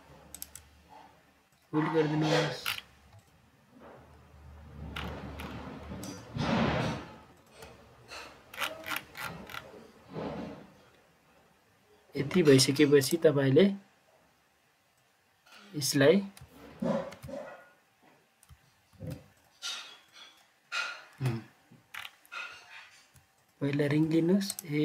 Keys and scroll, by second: 17.0 ctrl+z, 18.8 ctrl+z, 21.3 ctrl+z.